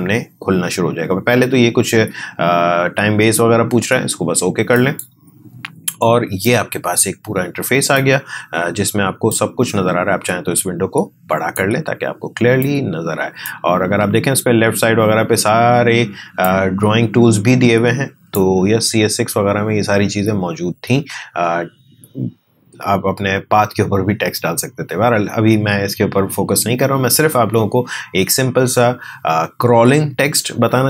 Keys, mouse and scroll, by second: 4.7-15.9 drag, 16.4-20.9 drag.